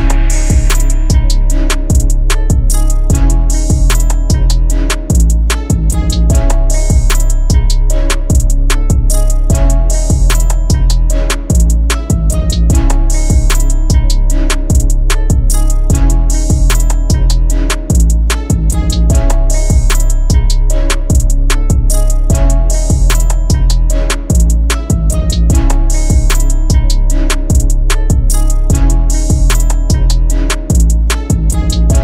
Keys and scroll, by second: 7.3 ctrl+z.